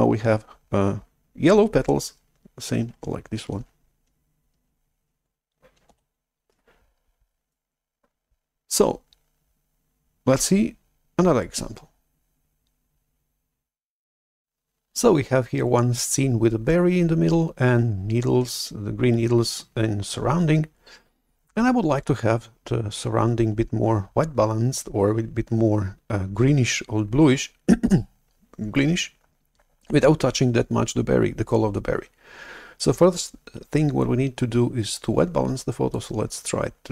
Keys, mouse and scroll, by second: 6.0 shift+super+F11, 36.0-36.9 drag.